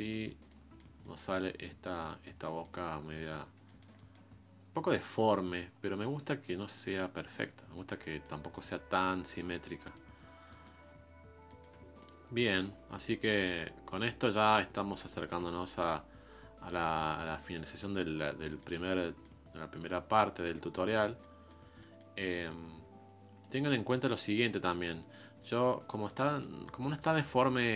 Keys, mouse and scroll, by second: 2.3 scroll down 2, 2.6 middle click, 2.9 scroll up 4, 3.2-5.1 middle drag, 5.1-8.1 ctrl+drag, 8.1-9.1 middle drag, 9.1 click, 9.8 middle click, 10.1-10.5 scroll up 1, 10.5-12.0 middle drag, 12.0-15.3 ctrl+drag, 15.3 middle click, 15.9-16.9 ctrl+drag, 16.9 scroll down 3, 17.1 middle click, 18.1-18.5 scroll down 3, 18.5 middle click, 18.8 scroll up 1, 19.0 middle click, 19.5-19.9 scroll up 1, 19.9 middle click, 20.3 scroll up 1, 20.5 middle click, 20.9-21.2 scroll down 3, 21.2-22.6 middle drag, 22.6-23.4 scroll up 2, 23.4-24.6 drag, 24.6 scroll down 1, 24.8-27.7 middle drag.